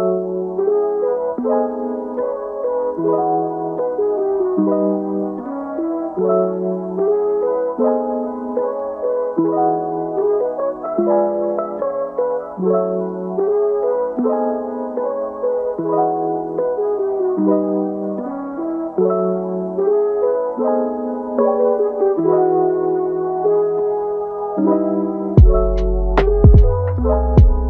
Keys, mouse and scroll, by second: 0.4 Tab, 2.0 click, 2.4-3.2 middle drag, 3.2 scroll down 2, 3.5-4.1 middle drag, 4.1-4.6 scroll down 1, 4.6-5.3 middle drag, 5.3-5.6 scroll up 4, 5.6-6.3 middle drag, 6.3-6.7 scroll up 4, 6.7-7.2 middle drag, 7.2 scroll down 3, 7.5-9.0 middle drag, 9.0 scroll down 1, 9.2-11.0 middle drag, 11.0-11.5 scroll up 1, 11.5-12.3 middle drag, 12.3 click, 12.7-13.4 middle drag, 13.4 shift+click, 13.9 shift+click, 14.5-16.4 middle drag, 16.4 shift+d, 17.1 s, 18.7 KP_3, 19.2-19.8 scroll up 1, 19.8 r, 22.0 click, 22.3-24.2 middle drag, 24.2 g, 26.6 middle click, 27.0 g.